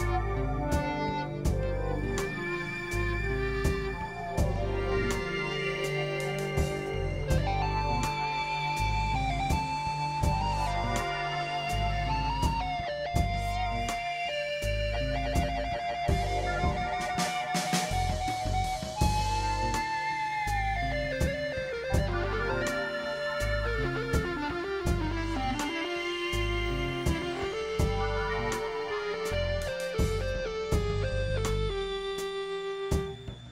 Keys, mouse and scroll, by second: 1.8-3.2 drag, 4.2 click, 5.0 click, 5.7 click, 9.8 click, 10.7 click, 11.3 click, 11.8 click, 12.4 click, 13.1 click, 14.2 click, 15.0 click, 17.5 click, 18.1 click, 18.7 click, 19.3 click, 20.0-21.6 drag, 21.8 click, 22.5 click, 23.3 middle click, 24.2 KP_Divide, 24.9 click, 25.5 middle click, 26.0 right click, 27.4 KP_Divide, 28.1 click, 28.3 click, 28.7 KP_1, 29.7-31.6 drag, 29.7 x, 30.6 x, 31.8 x, 31.9 click, 32.5 x, 32.8 x, 33.1 click.